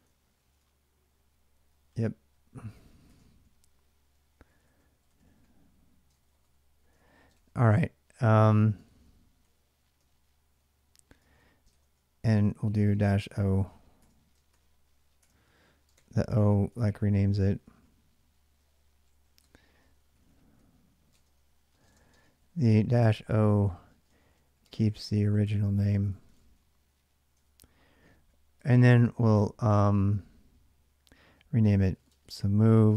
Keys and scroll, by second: 0.0-0.5 typing, 2.9 ctrl+[, 3.0-7.1 typing, 6.7 ctrl+[, 8.6 ctrl+[, 8.6 ctrl+j, 8.8-9.7 typing, 10.9-11.6 typing, 12.7-29.6 typing, 19.6 ctrl+[, 31.5-32.3 typing.